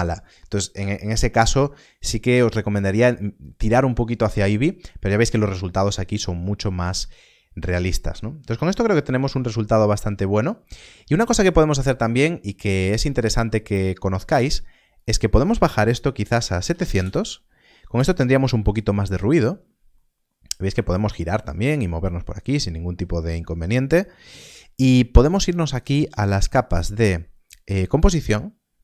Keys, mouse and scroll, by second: 19.9 middle click, 20.9 shift+middle click.